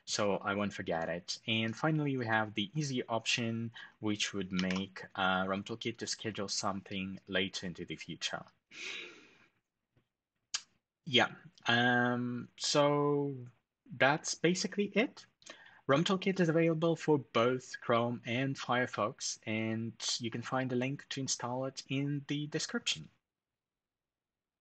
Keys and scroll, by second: 4.3 ctrl+alt+shift+super+4.